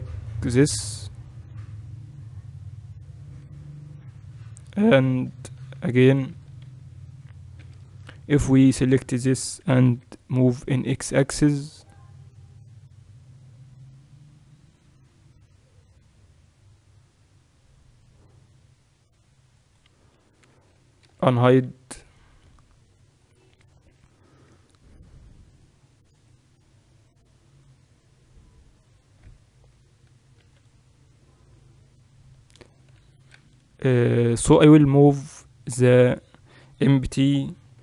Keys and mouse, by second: 1.6 Tab, 4.6-6.7 right drag, 5.0 Tab, 5.6 a, 6.3 z, 6.7 a, 7.6 b, 9.6 g, 20.1 Tab, 21.0 alt+h, 21.9 middle click, 22.5 a, 23.6-30.4 right drag, 24.0 h, 30.4 x, 31.4-33.4 right drag, 33.0 shift+c, 35.4-37.2 middle drag.